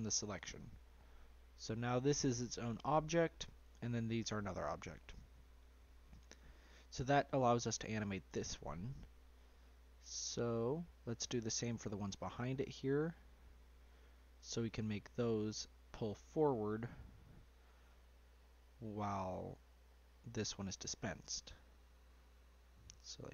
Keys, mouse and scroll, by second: 1.6-4.3 scroll down 1, 4.3-5.4 scroll down 2, 5.4 Tab, 6.0 click, 6.7-9.3 middle drag, 9.3 click, 11.9 Tab, 12.4-15.4 middle drag, 15.4 click, 18.0 l, 18.9 l, 19.8 l, 20.4-21.6 middle drag, 21.6-22.6 scroll up 2.